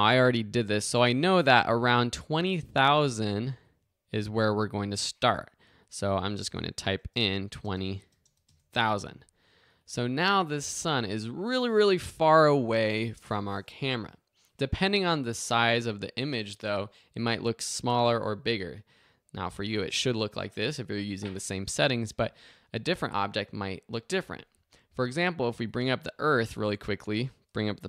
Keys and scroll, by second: 6.6-7.5 typing, 8.5 Return.